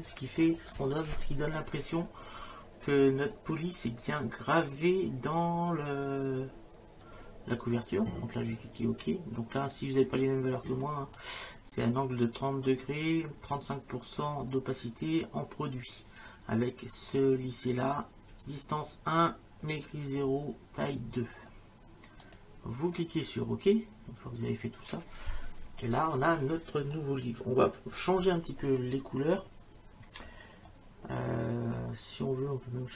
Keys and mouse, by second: 9.7 click, 22.2 click.